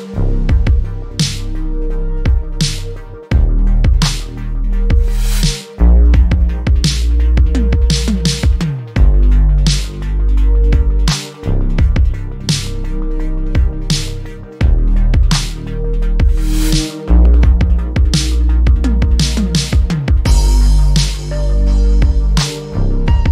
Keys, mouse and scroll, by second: 0.2 alt+click, 0.6 alt+middle click, 1.0 alt+click, 2.1 alt+middle click, 2.5 alt+click, 3.2-3.6 scroll up 1, 3.7 shift+click, 4.1 alt+middle click, 4.5 alt+click, 5.3-5.9 scroll down 1, 5.9 alt+middle click, 6.3 alt+click, 6.8 alt+middle click, 7.2 alt+click, 8.3 alt+middle click, 8.7 alt+click, 10.0 alt+middle click, 10.9 alt+click, 12.1 middle click, 13.3-13.7 scroll up 1, 13.7 middle click, 14.5-14.8 scroll up 1, 14.8 right click, 15.4 click, 23.2-23.3 scroll up 1.